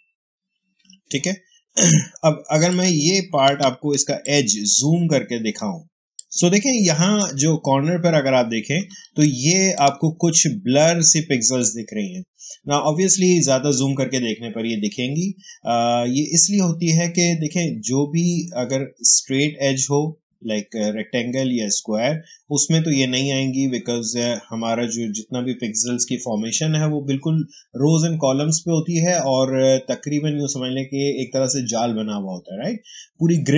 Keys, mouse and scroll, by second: 0.5 alt+BackSpace, 2.6 click, 3.4 space, 4.4-6.1 ctrl+drag, 6.3 space, 8.8 ctrl+space, 9.1 ctrl+click, 9.3 ctrl+space.